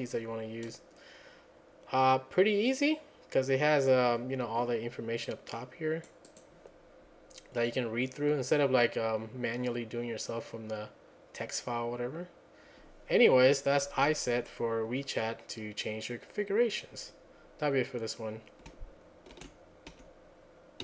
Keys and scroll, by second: 19.4 ctrl+a, 19.9 1.